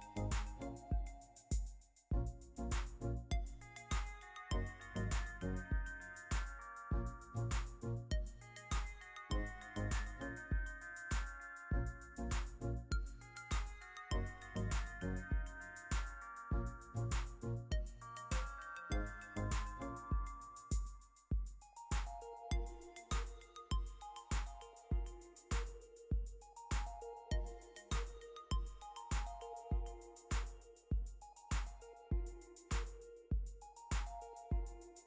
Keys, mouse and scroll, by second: 30.9 1.